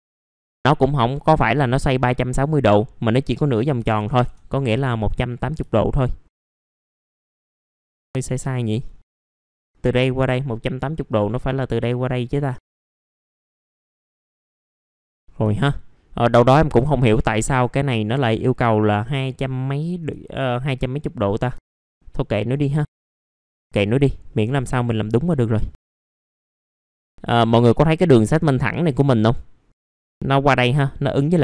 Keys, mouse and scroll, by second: 3.7 KP_1, 5.7 alt+middle click, 6.4-6.7 scroll down 1, 7.6 middle click, 8.1 scroll down 1, 9.0 middle click, 9.1 scroll up 1, 12.5 alt+middle click, 13.3-15.2 drag, 15.5 alt+middle click, 16.5 alt+middle click, 20.2 alt+middle click, 21.6 alt+middle click, 21.8 alt+middle click, 23.3 middle click, 23.3 scroll down 1, 23.6 middle click, 26.1-27.8 drag.